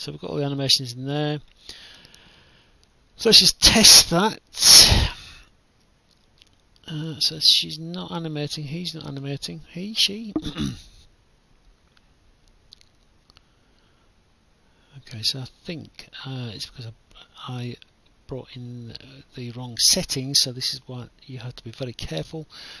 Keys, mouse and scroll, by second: 0.4 click, 1.1 right click, 1.5 d, 2.0 w, 2.8 right click, 3.6 click, 4.2 right click, 6.3 Escape, 7.0 right click, 7.1-8.3 typing, 8.8 alt+F9, 9.3 click, 10.2 click, 13.9 click, 16.3 click, 17.2 click, 17.5 shift+click, 19.1 ctrl+click, 21.0 click.